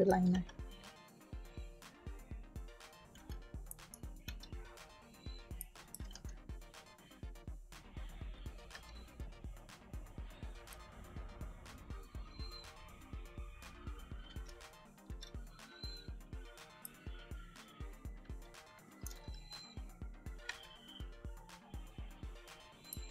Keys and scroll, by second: 0.2 b, 3.1 g, 3.6 space, 4.2 e, 5.5 space, 6.0 g, 8.6 b, 14.2 g, 15.0 e, 16.7 space, 19.1 e, 20.4 b, 22.8 space.